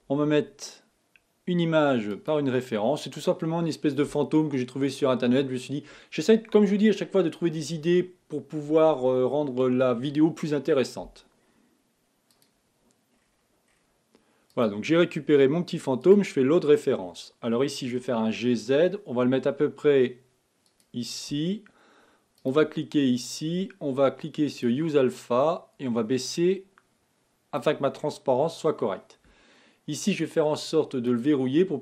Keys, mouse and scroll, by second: 22.7 click, 24.8 click, 25.4-28.4 drag, 28.4 scroll up 2, 31.4 click.